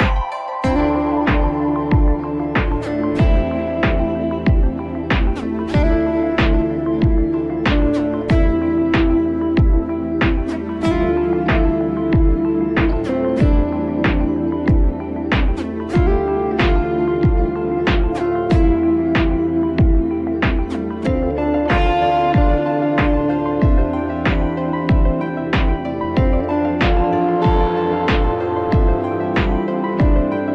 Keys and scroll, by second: 0.4 ctrl+j.